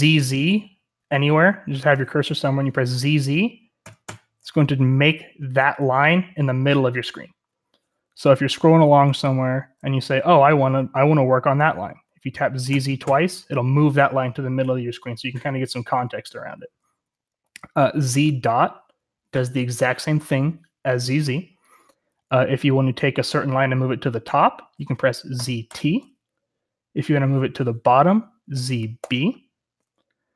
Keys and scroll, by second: 0.5-2.1 typing, 3.7 typing, 8.0-11.1 typing, 12.6 z, 12.9 z, 25.3 z, 25.6 t, 28.4 z, 28.9 b.